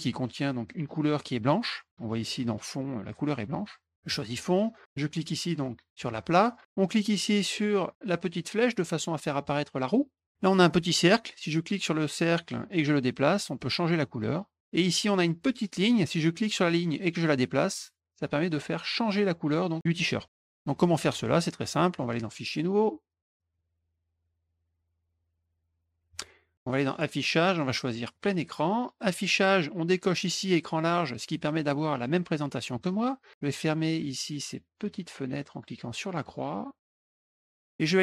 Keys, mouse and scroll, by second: 4.1 click, 5.9 click, 6.7 click, 8.4 click, 11.6 click, 12.7-14.6 drag, 16.4-20.5 drag, 22.3 click, 23.2 click, 26.9 click, 28.1 click, 29.0 click, 31.1 click, 34.8 click, 35.9 click, 36.8 click, 37.0 click, 37.3 click.